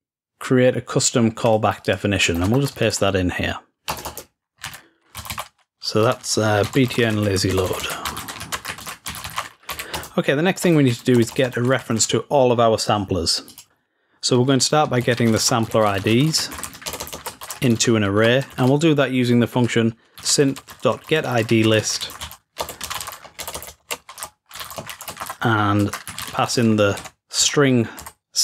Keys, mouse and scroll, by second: 1.5-2.7 drag, 13.5 click.